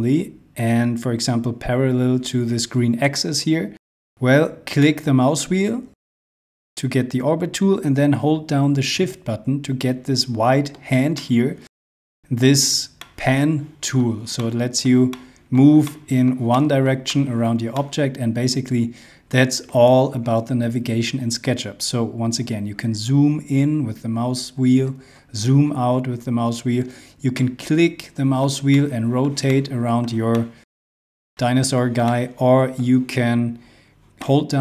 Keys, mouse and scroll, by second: 4.9 middle click, 11.1 shift+middle click, 22.0-22.4 scroll up 1, 24.8-25.6 scroll down 1, 25.8-26.5 scroll down 1, 26.5-27.0 scroll up 1, 27.3 middle click, 31.7 scroll up 1, 32.0 middle click.